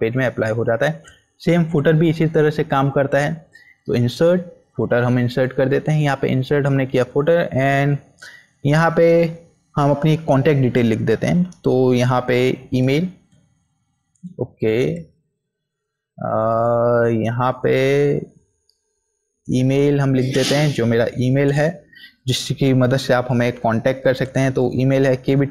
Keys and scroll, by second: 11.9-13.1 typing, 13.0 Up, 13.2 Up, 14.7 BackSpace, 19.4 Up, 20.5 End, 21.0 shift+;, 21.2 space, 22.8 Caps_Lock, 22.9-24.0 typing, 25.1-25.5 typing.